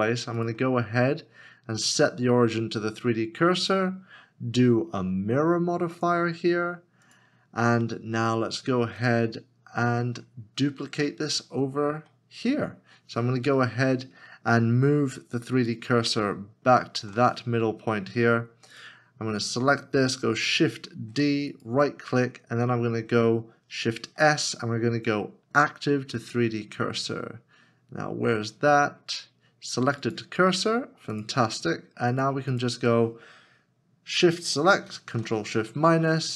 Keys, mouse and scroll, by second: 0.4 right click, 10.1 right click, 10.3 scroll down 1, 11.1 shift+middle click, 15.7 shift+right click, 16.3 ctrl+shift+right click, 21.0 shift+d, 21.6 right click, 23.7 Right, 24.0 shift+s, 32.5 shift+s, 32.6 shift+click, 34.8 ctrl+s, 34.9 ctrl+shift+-.